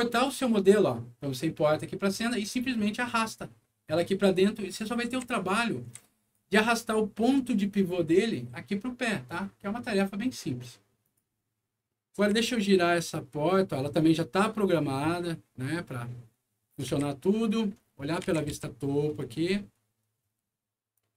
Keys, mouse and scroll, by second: 4.7-6.3 right drag, 5.2 w, 11.0 click, 11.8 middle click, 12.1 e, 13.1-16.7 drag, 16.8 w, 18.0 middle click, 18.5 z, 19.0-20.2 scroll up 3, 20.2 scroll down 1, 20.3 scroll up 1, 20.9-21.1 drag.